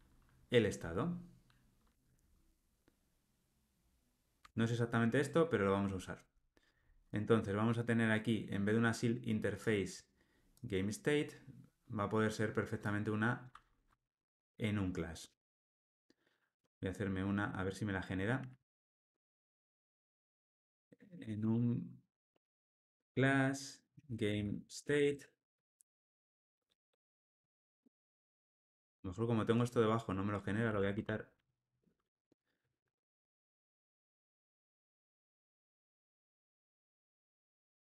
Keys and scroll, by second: 4.4 Tab, 16.5 Escape, 23.0 Tab, 30.6 super+x.